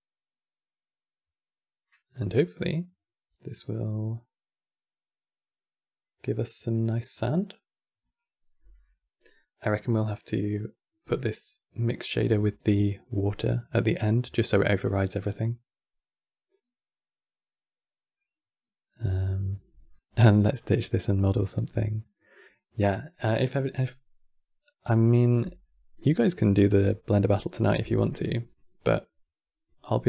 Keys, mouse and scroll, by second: 19.6-22.6 middle drag.